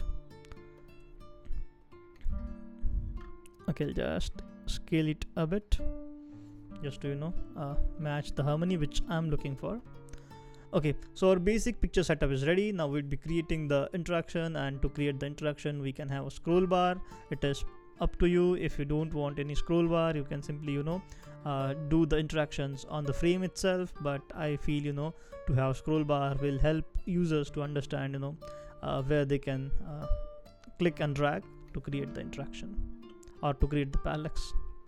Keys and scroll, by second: 7.6 Down, 28.6 super+x, 31.5 super+v, 32.4 shift+Up, 32.9 shift+Up, 33.0 shift+Up, 33.6 shift+Right, 34.1 shift+Right, 34.2 shift+Right.